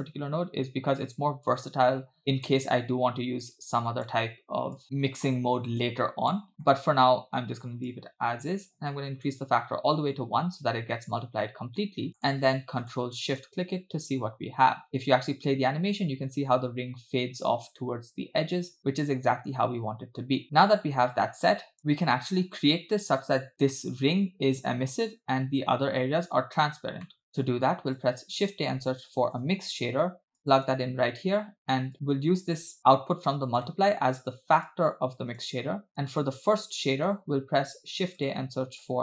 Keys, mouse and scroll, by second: 0.3-0.8 scroll down 2, 1.5-2.5 drag, 3.5-4.1 drag, 4.8 click, 5.8-6.5 drag, 6.5 middle click, 6.5-6.8 scroll up 2, 7.9-9.4 drag, 10.0-10.6 scroll down 2, 12.1 middle click, 12.1 scroll down 1, 12.9 click, 14.8 ctrl+shift+click, 14.9 space, 14.9-17.5 scroll up 4, 20.4 space, 21.4-21.8 drag, 21.8 space, 27.1 middle click, 27.4-27.9 scroll down 2, 27.9 shift+a, 31.9-32.8 drag, 33.2 click, 33.8-34.6 scroll up 2, 34.7-35.6 drag, 35.9 click, 36.7-37.3 drag, 37.7 shift+a.